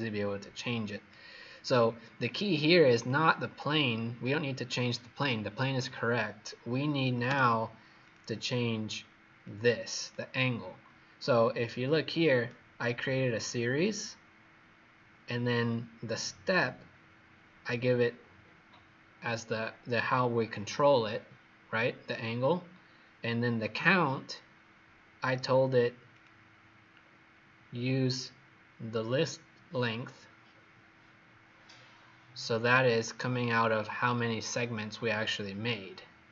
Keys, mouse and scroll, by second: 0.4 click, 7.9 click, 11.5 right click, 13.3 click, 26.8-27.6 scroll down 2, 27.6-29.1 scroll down 1, 31.1-32.4 scroll down 5, 32.4 scroll up 1, 34.9-35.6 scroll down 4.